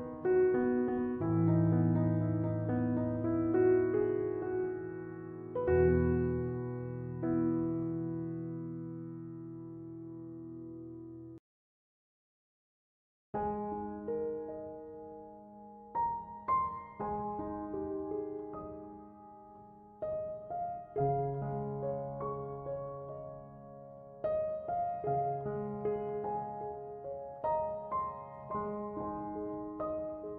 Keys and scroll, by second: 0.6-1.8 typing, 4.9-5.9 typing, 17.2-18.4 typing.